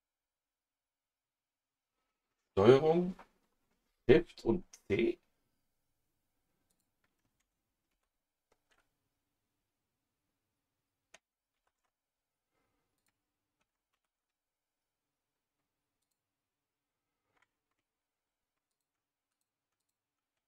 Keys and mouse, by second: 6.7 click, 7.9 ctrl+shift+c, 11.5 ctrl+shift+c, 13.0 click, 13.9 ctrl+shift+c, 16.0 click, 18.1 a, 19.3 click, 19.8 click.